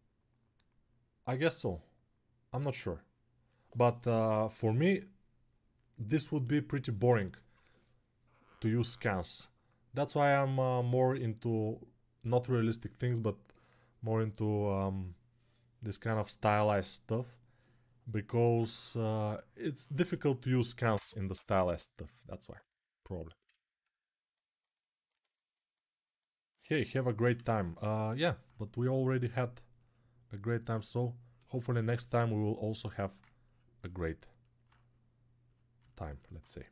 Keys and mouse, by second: 26.9 alt+q, 36.1-36.7 shift+drag.